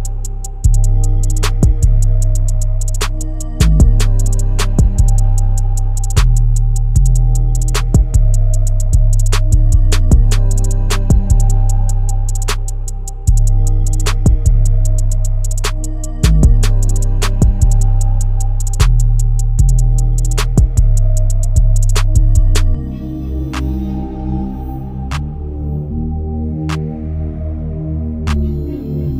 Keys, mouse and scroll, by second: 10.0 alt+e, 14.4-14.9 scroll down 4, 14.9 e, 24.2 middle click, 25.4 Tab.